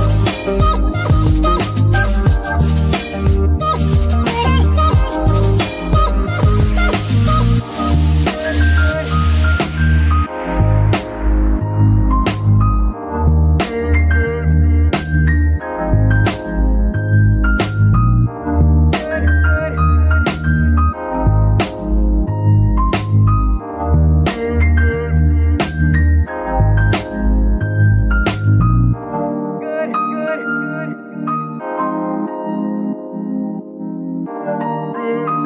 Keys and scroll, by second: 0.4 z, 4.9 KP_3, 5.3 z, 8.4 g, 8.5 y, 11.8 Tab, 14.2 KP_Divide, 16.1 Tab, 17.0 KP_Decimal, 17.9 z, 20.7 g, 20.8 y, 25.1 KP_Divide, 26.8 Tab, 28.1 Tab, 29.2 a, 32.5 Escape, 33.5 g, 34.4 Escape.